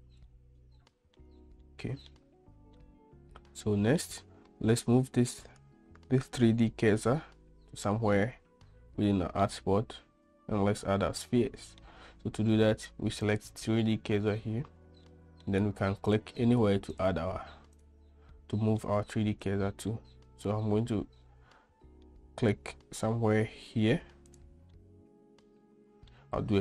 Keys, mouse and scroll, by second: 0.6-1.4 middle drag, 1.8-2.3 shift+middle drag, 3.0-4.2 middle drag, 9.7-12.0 middle drag, 13.5 click, 15.3-15.7 middle drag, 16.4 click, 18.0 click, 18.6-19.0 middle drag, 19.7 drag, 20.1-22.3 middle drag, 24.5 click, 25.0-26.3 middle drag.